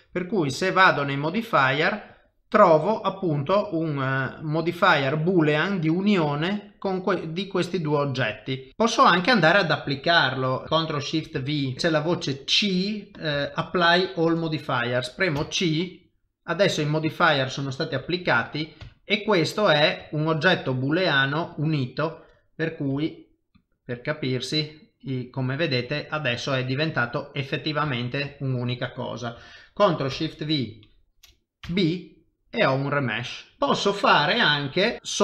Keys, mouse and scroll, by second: 1.1 click, 6.4 click, 7.4 middle click, 10.6 middle click, 11.3 ctrl+shift+v, 16.2 middle click, 18.0 g, 18.8 Tab, 19.2 middle click, 20.1 ctrl+middle click, 20.7 middle click, 21.5 click, 22.1 middle click, 22.9 g, 23.8 middle click, 26.5 Tab, 26.7 middle click, 28.4 middle click, 30.1 ctrl+shift+v, 32.1 middle click, 33.2 middle click, 33.6 shift+middle click, 34.9 KP_7, 35.0 shift+middle click.